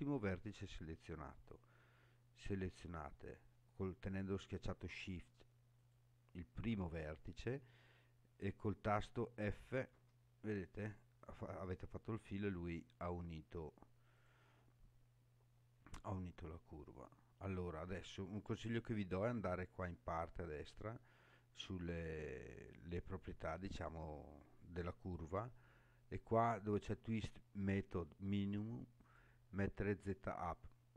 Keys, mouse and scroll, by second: 1.1 scroll up 3, 1.9-2.6 scroll up 4, 5.8 shift+click, 7.1 scroll down 2, 7.7 scroll down 3, 8.3 scroll down 2, 9.9 f, 10.8 scroll up 2, 11.4 scroll up 3, 14.1 click, 15.5-16.5 scroll down 5, 25.0 click, 29.0-30.1 drag.